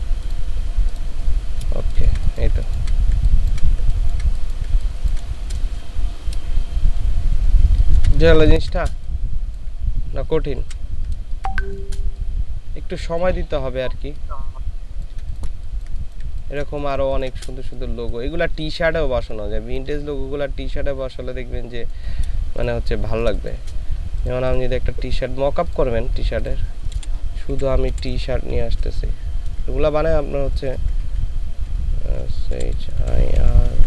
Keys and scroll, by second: 1.8 ctrl+space, 2.6 ctrl+space, 3.1 ctrl+space, 3.9 ctrl+space, 4.7 ctrl+space, 7.7 ctrl+space, 8.4 ctrl+space, 10.6 ctrl+g, 11.2 ctrl+space, 15.6 ctrl+shift+space, 17.0 ctrl+shift+space, 23.1 ctrl+space, 27.4-29.5 typing, 32.8-33.8 typing.